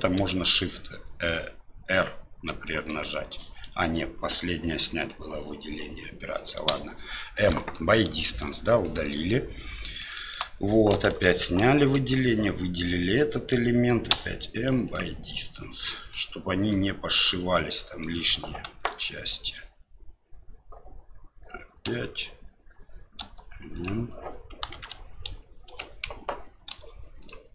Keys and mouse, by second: 2.5 shift+r, 6.6 m, 8.8 middle click, 10.1 shift+middle click, 11.0 alt+a, 14.1 m, 15.9 middle click, 16.7 middle click, 17.7 middle click, 18.6 alt+a, 23.2 l, 23.2 m, 24.7 alt+a, 25.6 l, 26.7 m.